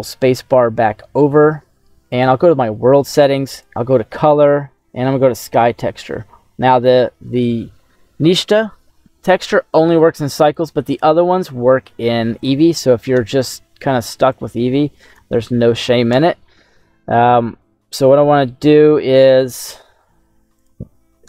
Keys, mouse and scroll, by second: 2.0 click, 3.4-5.4 drag, 10.4-12.4 drag, 14.3 click.